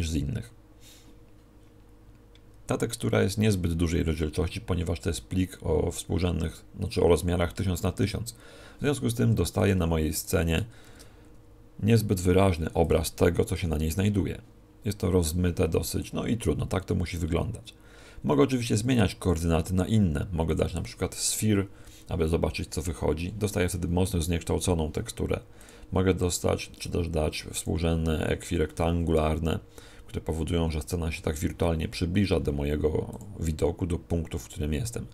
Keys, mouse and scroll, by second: 9.3 Escape, 10.1 right click, 10.8 shift+f, 12.9 click.